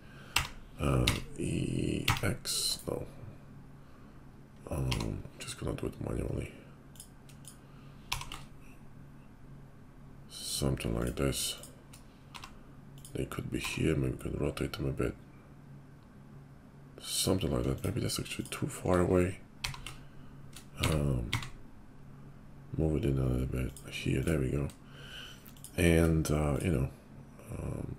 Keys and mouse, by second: 4.9 g, 8.0 g, 11.4 shift+click, 11.5 shift+middle click, 12.3 g, 13.5 r, 16.6 middle click, 17.7 shift+click, 18.3 shift+click, 18.8 middle click, 19.6 g, 22.6-24.1 middle drag, 24.1 click, 24.2-25.5 middle drag, 25.5 click, 25.6-27.9 middle drag.